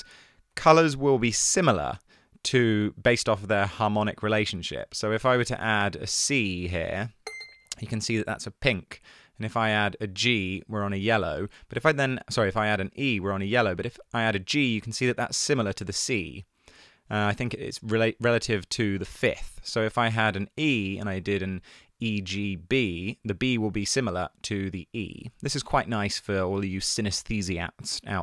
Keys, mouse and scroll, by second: 1.0 1, 27.9 super+z.